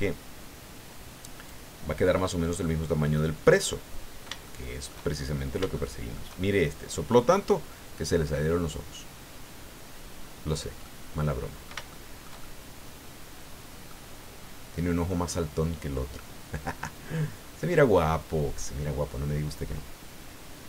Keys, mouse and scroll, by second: 3.4-5.1 middle drag, 5.2 shift+scroll up 1, 5.7 shift+middle click, 7.5-10.7 drag, 10.8 middle click, 11.9-14.0 shift+middle drag, 15.1-16.1 middle drag, 16.8 scroll down 1, 17.4 scroll down 2.